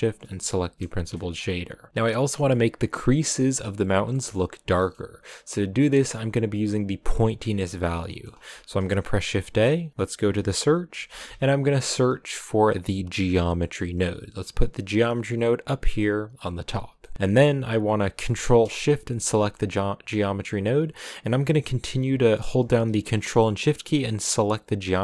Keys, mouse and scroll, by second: 1.0 KP_0, 1.9-2.3 scroll down 4, 4.4-13.3 middle drag, 19.1 ctrl+shift+click, 19.7-21.4 scroll up 1, 21.4-21.9 scroll up 1, 24.4 ctrl+shift+click.